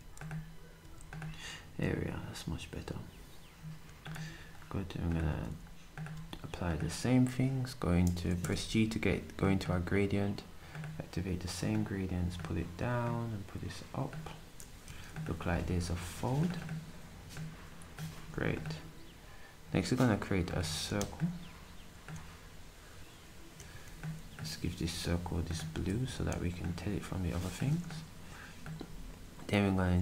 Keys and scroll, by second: 5.3 d, 14.8 s, 23.7 s.